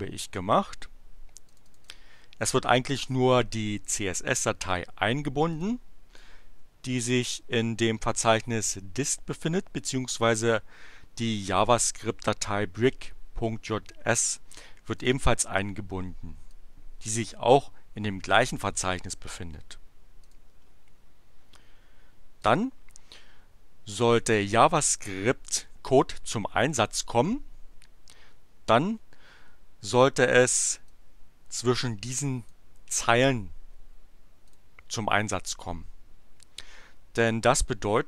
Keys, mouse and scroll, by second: 1.4 click, 5.5 click, 6.0-7.7 drag, 11.2 click, 15.0 click, 16.5-17.7 drag, 20.2 click, 22.4 click, 24.2 click, 30.9-32.6 drag, 34.4 click.